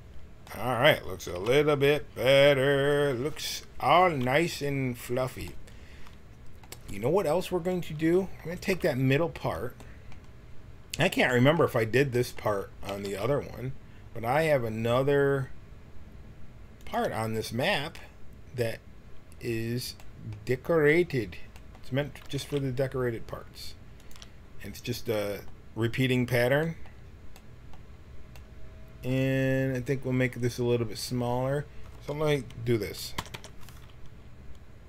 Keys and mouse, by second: 0.3 middle click, 1.3 KP_1, 7.7-10.8 right drag, 12.9 g, 22.2 g, 27.8-29.2 middle drag, 33.1 u, 33.3 u.